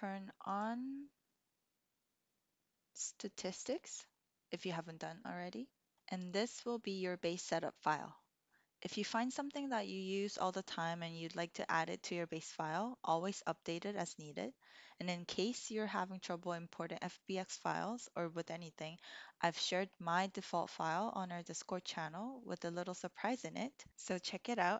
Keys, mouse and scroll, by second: 0.4-4.0 drag.